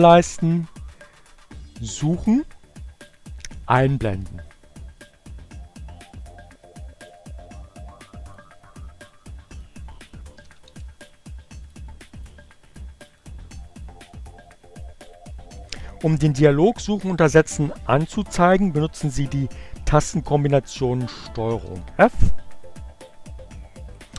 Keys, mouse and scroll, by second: 2.2-3.5 drag, 4.8 click, 7.8 click, 9.2 click, 9.7-10.7 typing, 11.1 click, 12.4 click, 14.8 click, 20.2 ctrl+f, 22.9-24.1 drag.